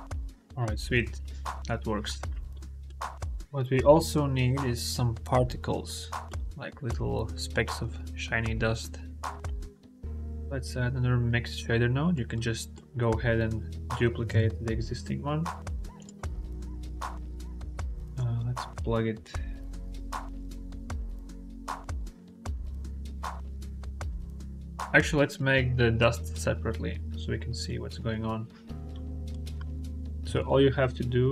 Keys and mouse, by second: 0.9 ctrl+z, 2.5 click, 6.1 click, 9.7 click, 10.6-12.6 drag, 14.2 shift+d, 15.8 click, 18.0-22.1 drag, 22.7-23.2 drag, 26.0 ctrl+z, 26.3 ctrl+z, 26.6 ctrl+z, 27.2 click, 28.0 click, 28.5 click, 30.1 shift+a.